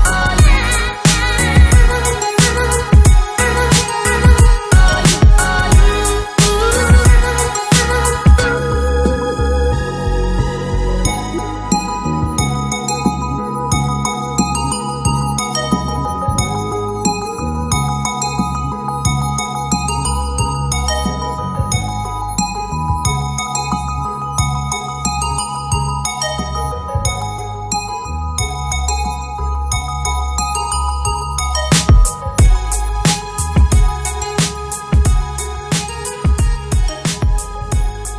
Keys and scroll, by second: 3.6 ctrl+d, 32.9 ctrl+[.